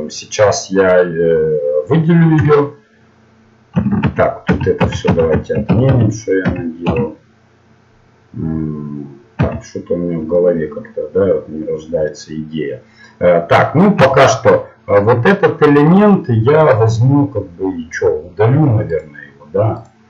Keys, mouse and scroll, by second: 2.3 l, 4.0 ctrl+z, 4.5 ctrl+z, 4.8 ctrl+z, 5.0 ctrl+z, 5.3 ctrl+z, 5.6 ctrl+z, 5.9 ctrl+z, 6.4 ctrl+z, 6.8 ctrl+z, 9.3 ctrl+z, 10.3-11.9 middle drag, 13.9 a, 14.6-15.8 middle drag, 15.8-18.9 middle drag, 18.9-20.0 right drag.